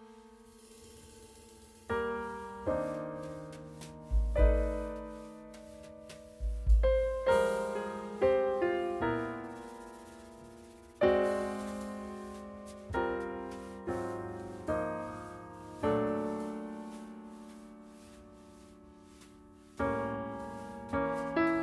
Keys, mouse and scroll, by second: 2.1 middle click.